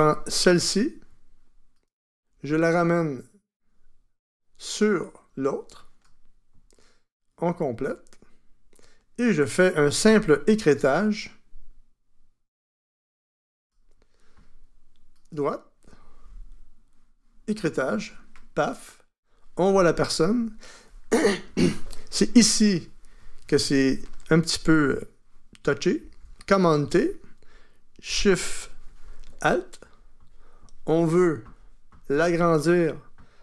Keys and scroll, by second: 26.0 super+t.